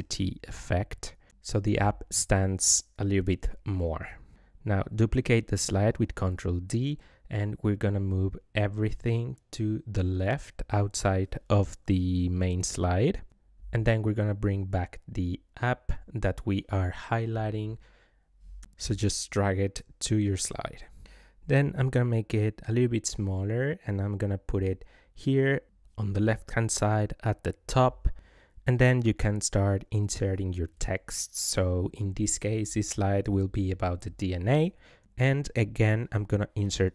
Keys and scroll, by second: 4.0 ctrl+d, 28.8 ctrl+v.